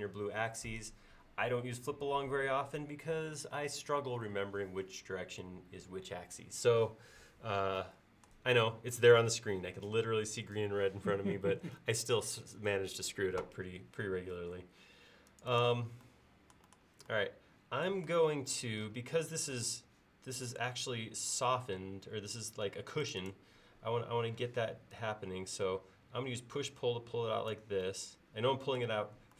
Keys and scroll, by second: 24.5 p.